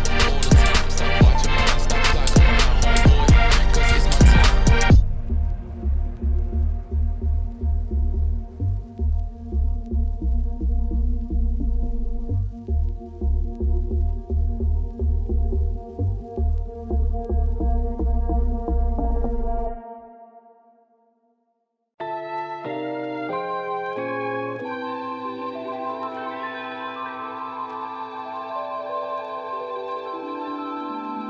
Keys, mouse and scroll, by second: 2.1 middle click, 3.0-3.9 scroll down 2, 3.9 shift+middle click, 4.5-6.7 scroll up 1, 6.7 scroll up 1, 6.8-12.9 drag, 12.9 middle click, 13.1 scroll up 2, 13.3-14.3 middle drag, 14.3-17.1 drag, 17.9-26.5 drag, 26.5 middle click, 27.1 scroll down 6, 27.3 middle click, 27.6-27.9 scroll up 5, 27.9 scroll down 1, 28.1-29.3 middle drag, 29.7-31.2 scroll up 3.